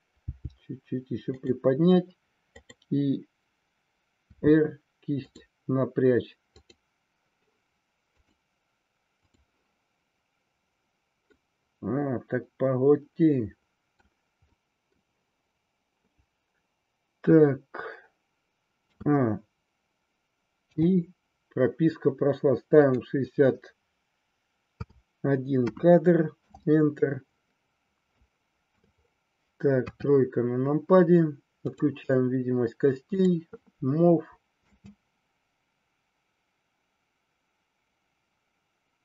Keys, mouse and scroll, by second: 0.2 g, 1.3 click, 2.5-3.8 drag, 4.2 r, 5.3 click, 6.5-7.9 drag, 11.4-14.0 middle drag, 14.4-15.0 middle drag, 18.8 a, 20.6 i, 22.8-26.6 drag, 28.1 shift+middle click, 29.8 KP_3, 31.6 click, 34.4 space.